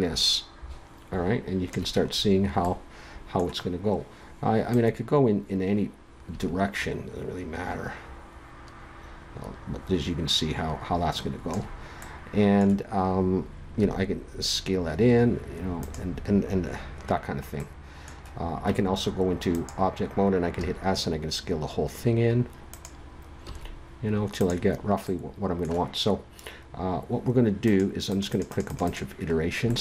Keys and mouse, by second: 2.2 middle click, 2.6 click, 4.7-6.5 drag, 6.5-12.0 middle drag, 13.8 s, 14.0 middle click, 18.7 Tab, 20.5 s, 23.4 s, 25.1 click.